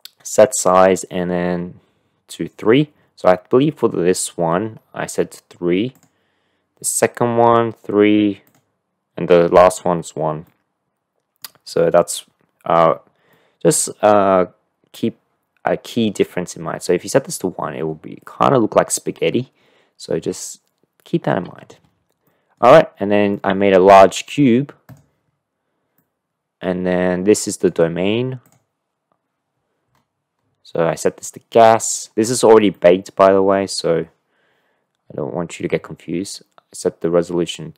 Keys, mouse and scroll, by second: 5.9 click, 8.4 click, 10.5-11.4 middle drag, 12.0-12.9 middle drag, 13.3-13.7 middle drag, 22.2 middle click, 23.4 middle click, 25.2 middle click, 26.1-27.8 middle drag, 28.5 middle click, 32.9 middle click.